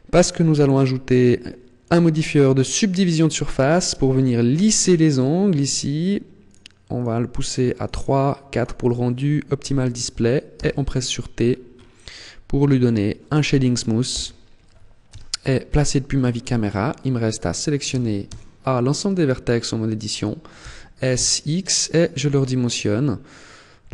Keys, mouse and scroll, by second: 0.9 click, 3.5 middle click, 6.3 click, 6.8 click, 7.6 click, 7.8 click, 8.4 click, 10.4 t, 11.3-11.7 scroll up 7, 12.7 click, 13.9 t, 14.9 KP_0, 16.1 Tab, 17.8 a, 18.1 a, 20.5 s.